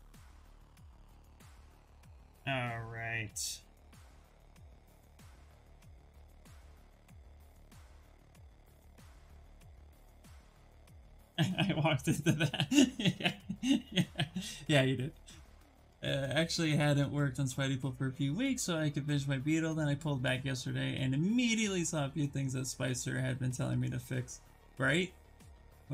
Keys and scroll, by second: 6.2 s.